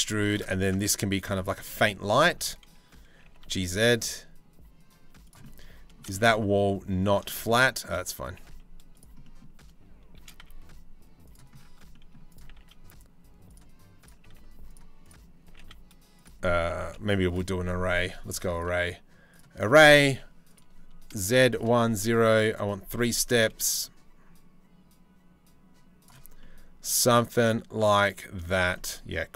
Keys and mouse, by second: 0.2 Tab, 0.7 middle click, 1.3 middle click, 1.7 shift+middle click, 2.8 g, 5.0-5.5 middle drag, 5.7-6.7 shift+middle drag, 6.9 shift+middle click, 7.9 g, 8.8 middle click, 9.8 shift+d, 12.0 g, 13.8 g, 15.0 g, 16.5 Delete, 16.8 click, 18.2 click, 20.0 click, 21.1 click, 22.1 click, 27.9 middle click, 29.2 g.